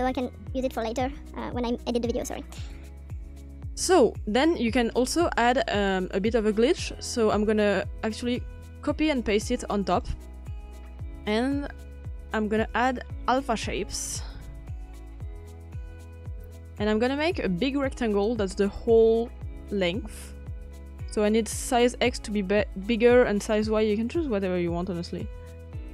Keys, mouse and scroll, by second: 0.1 ctrl+c, 1.0 ctrl+v, 6.3-9.0 drag, 9.0 ctrl+v, 9.5-10.8 drag, 11.7-15.2 drag, 15.2 typing, 15.8 click, 19.7 click, 21.0-22.8 drag.